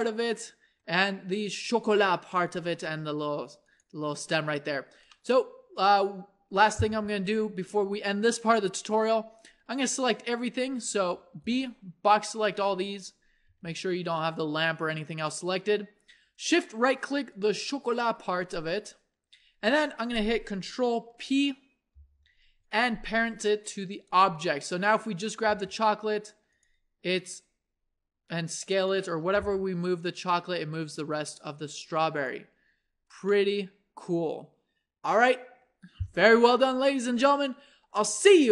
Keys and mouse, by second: 4.5 middle click, 9.4-11.1 middle drag, 9.4 a, 11.1 b, 13.5-16.9 middle drag, 13.5 g, 21.9 ctrl+p, 24.9-26.6 drag, 26.4 g, 27.3 s, 29.3 r, 32.7-34.9 middle drag.